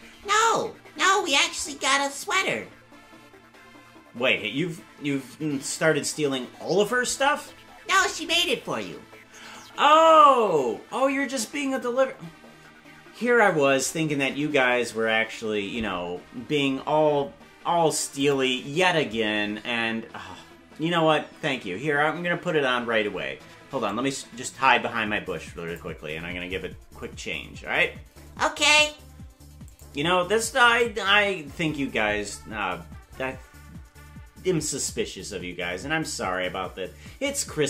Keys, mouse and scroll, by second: 36.3-37.6 typing.